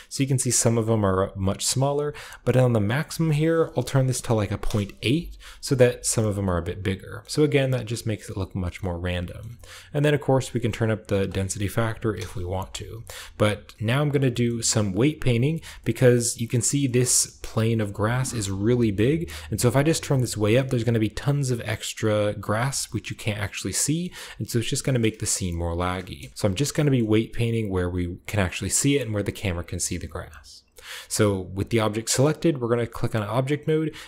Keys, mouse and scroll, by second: 3.0 click, 3.9-4.5 typing, 5.7-6.2 scroll down 1, 7.0 shift+scroll up 1, 7.1-7.6 shift+middle drag, 7.2 scroll down 1, 8.1-8.5 shift+middle drag, 8.3 scroll down 1, 8.5 typing, 8.7 shift+middle click, 8.9-9.7 shift+scroll down 1, 9.3 shift+middle click, 9.6 shift+middle click, 10.2-11.9 shift+drag, 10.2-11.7 shift+scroll up 1, 11.7 typing, 13.7-14.4 scroll down 1, 14.3-15.2 shift+middle drag, 14.4-15.1 shift+scroll up 1, 15.1 shift+scroll up 1, 15.4 shift+middle drag, 15.4 shift+scroll down 1, 15.5-16.1 shift+scroll up 2, 15.8 middle click, 16.2-16.7 middle drag, 16.2 scroll down 1, 16.9 shift+middle drag, 17.2-17.6 middle drag, 17.2 scroll up 1, 17.5-19.1 right drag, 18.5-19.1 shift+scroll up 1, 19.1-20.3 shift+middle drag, 20.6-22.5 shift+middle drag, 22.9-23.4 middle drag, 23.9-25.9 middle drag, 25.9 KP_0, 26.4-28.5 scroll up 1, 26.8-28.5 shift+middle drag, 28.8-31.7 shift+middle drag, 29.5-31.7 shift+scroll down 1, 32.4-33.8 drag.